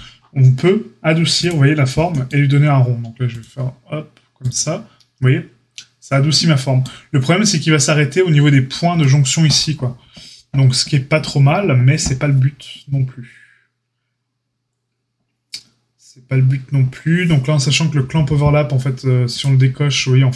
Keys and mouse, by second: 3.2-6.1 drag, 6.1-19.4 shift+right drag, 19.4-20.3 middle drag.